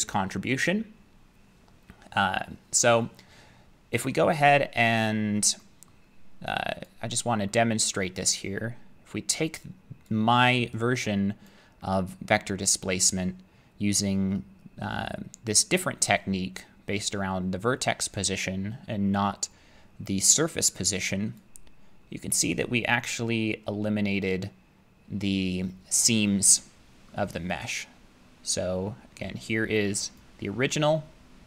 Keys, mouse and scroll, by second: 4.4 middle click, 5.9 middle click, 6.9 click, 7.9 middle click, 9.1 middle click, 10.1 click, 11.5 click, 11.9 scroll, 12.1 middle click, 12.4 middle click, 12.7 middle click, 21.4-27.1 drag, 27.1-30.2 middle drag, 28.3-28.7 scroll, 30.2-31.4 drag.